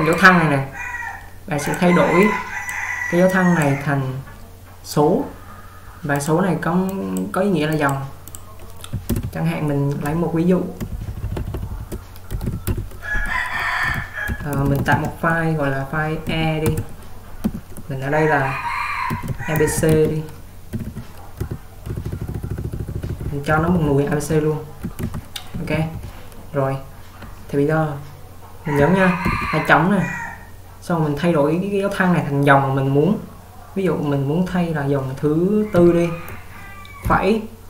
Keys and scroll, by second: 9.2 alt+Return, 11.0 ctrl+Up, 11.1 ctrl+Up, 11.3 ctrl+Up, 11.4 ctrl+Up, 12.1-17.5 typing, 29.5 :, 35.9-37.6 typing.